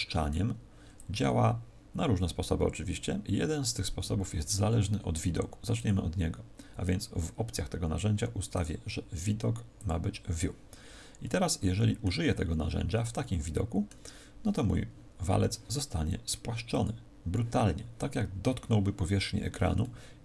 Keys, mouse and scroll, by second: 5.7 click, 7.8-8.4 scroll down 1, 8.4 click, 8.4-9.5 scroll down 1, 11.2 middle click, 13.1 middle click, 14.5-15.0 scroll up 3, 16.6 click, 19.7 middle click.